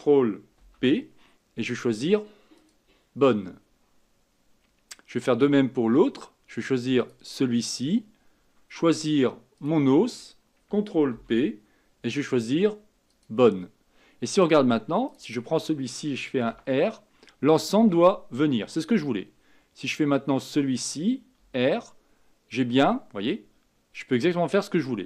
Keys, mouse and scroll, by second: 0.5 ctrl+p, 7.0 click, 9.5 shift+click, 11.1 ctrl+p, 15.0 click, 16.5 r, 20.4 click, 21.4 r.